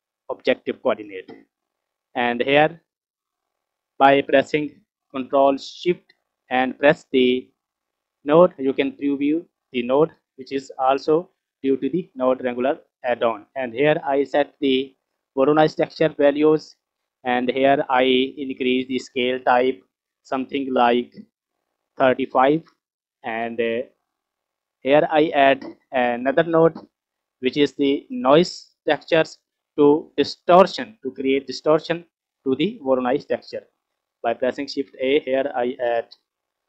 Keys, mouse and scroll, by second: 1.3 scroll down 1, 1.5 middle click, 2.0 scroll up 2, 3.0 click, 7.6 ctrl+shift+click, 9.6 scroll down 1, 9.8 middle click, 19.0-21.7 drag, 23.0-23.9 scroll up 4, 23.9 scroll down 3, 24.2 middle click, 25.0 click, 26.6 scroll up 2, 27.2-27.7 middle drag, 34.4 shift+a.